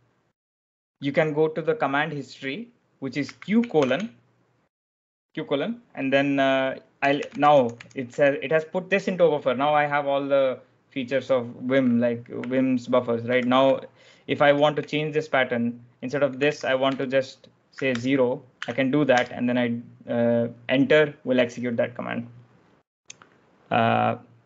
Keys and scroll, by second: 3.1 q, 3.7 shift+;, 6.7-8.5 typing, 11.6-14.7 typing, 16.1-19.1 typing.